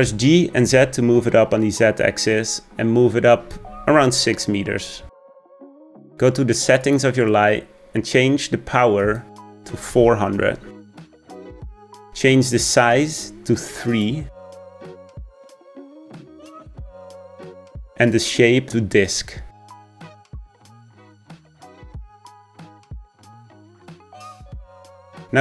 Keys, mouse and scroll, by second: 0.1-1.8 scroll down 1, 1.8 g, 7.8 click, 10.4-13.5 drag, 14.5-23.2 drag, 23.2-24.4 scroll down 1.